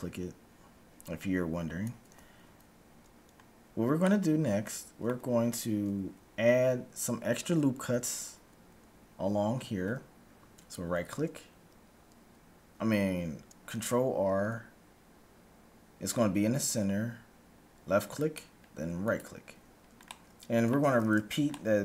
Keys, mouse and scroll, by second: 1.8 d, 3.8 scroll down 1, 4.0-7.0 middle drag, 10.8 ctrl+r, 20.1-21.8 middle drag.